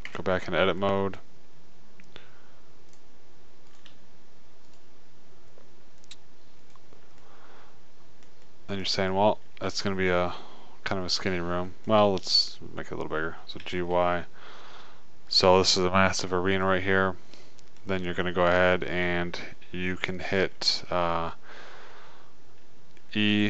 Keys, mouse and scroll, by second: 0.5 Tab, 3.1 middle click, 3.2 click, 7.5-8.6 drag, 14.2 g, 15.1-17.0 middle drag.